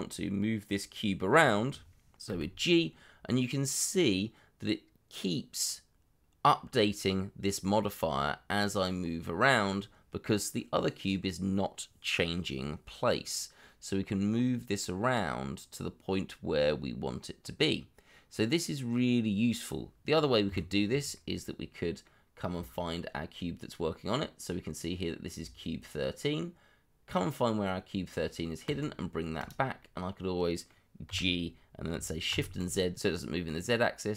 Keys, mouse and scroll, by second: 0.5 middle click, 1.5 shift+middle click, 2.2 g, 20.4 Escape, 21.1 middle click, 25.7 scroll down 1, 29.8 middle click, 31.0 g, 32.3 shift+z.